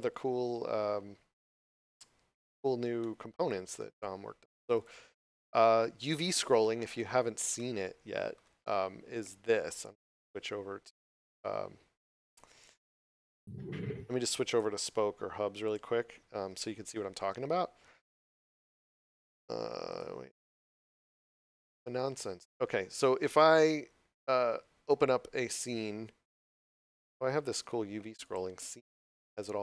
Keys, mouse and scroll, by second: 1.4 click, 2.9 middle click, 4.6 click, 6.0 middle click, 9.9 click, 13.6 click, 28.1 click, 28.9 scroll down 1.